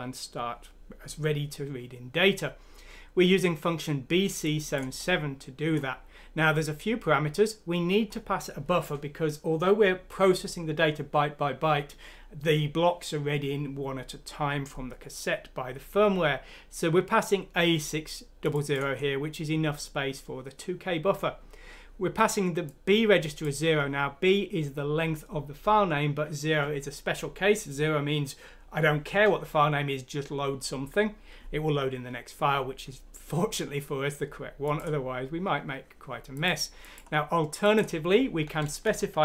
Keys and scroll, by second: 38.8 shift+Home.